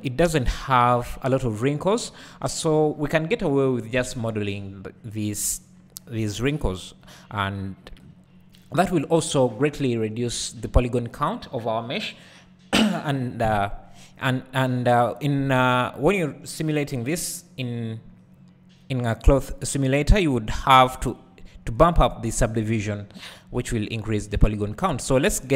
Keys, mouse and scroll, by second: 1.1-25.5 drag, 25.1-25.5 scroll up 2.